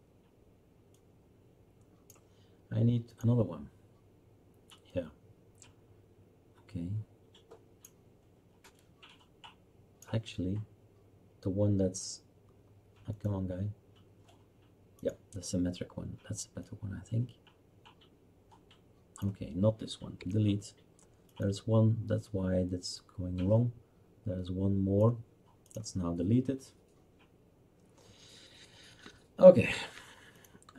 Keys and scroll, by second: 20.2 Delete.